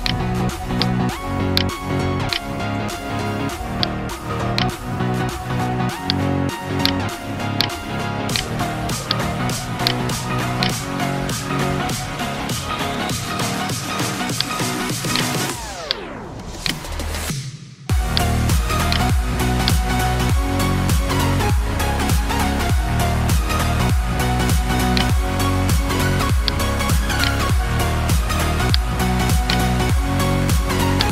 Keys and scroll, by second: 2.6 space, 7.3 space, 7.9 space, 26.0 space.